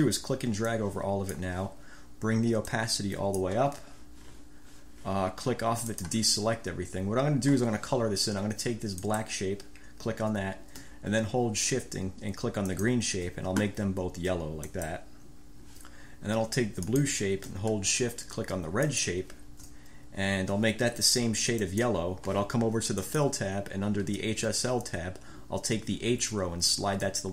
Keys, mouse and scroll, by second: 0.8 click, 2.8 click, 6.0 click, 9.1-9.5 scroll up 1, 12.8 shift+click, 14.8 click, 17.0 click, 19.0 shift+click, 21.8 click, 23.1 click, 27.1 click.